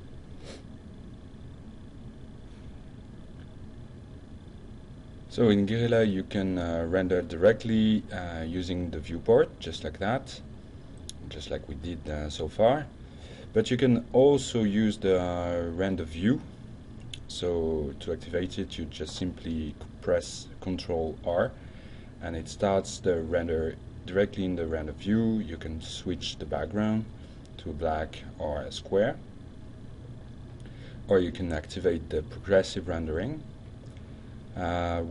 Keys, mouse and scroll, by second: 0.1 click, 4.9 click, 7.7 F10, 7.7 ctrl+s, 10.6-12.8 shift+middle drag, 16.7 click, 17.2 click, 20.6 ctrl+r, 24.5 click, 26.1 click, 26.8 click, 30.6 click, 31.4 click.